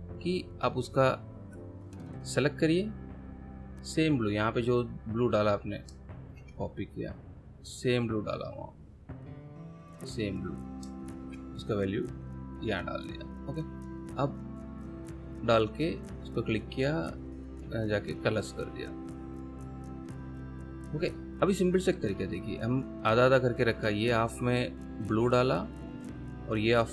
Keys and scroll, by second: 8.3 ctrl+c, 11.2 ctrl+v.